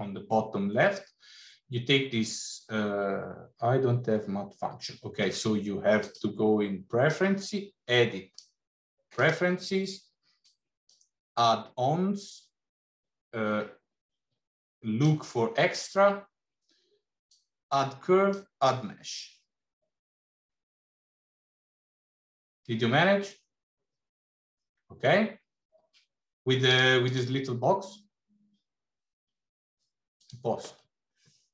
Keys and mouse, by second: 6.0-9.4 drag.